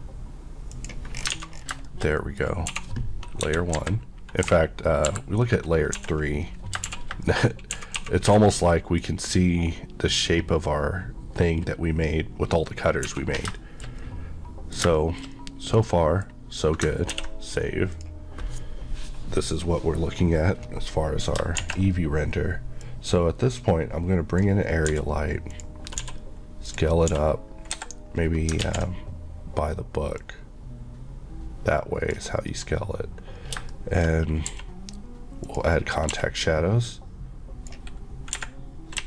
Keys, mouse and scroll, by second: 1.2-1.6 scroll down 2, 1.4 alt+a, 1.9 shift+middle click, 2.2 middle click, 2.8 1, 3.5 KP_1, 3.8 KP_3, 6.0-8.3 typing, 6.5 scroll down 1, 7.3 shift+middle click, 8.7 middle click, 9.1 scroll up 1, 9.4 middle click, 12.4 scroll down 1, 13.1 scroll down 1, 13.1 1, 13.6 shift+middle click, 15.0 shift+middle click, 17.1 ctrl+s, 18.0 click, 21.6 shift+a, 22.9 click, 24.9 click, 25.0 g, 25.5 click, 26.0 click, 26.1 s, 26.7 click, 27.1 s, 27.8 Escape, 28.2-28.6 scroll down 2, 28.7 ctrl+z, 30.2 click, 32.5 scroll, 32.5 scroll up 1, 33.7 shift+middle click, 34.1 scroll, 34.1-34.5 scroll down 1, 34.6 q, 35.5 click, 36.2 q, 36.9 click, 38.4 Escape.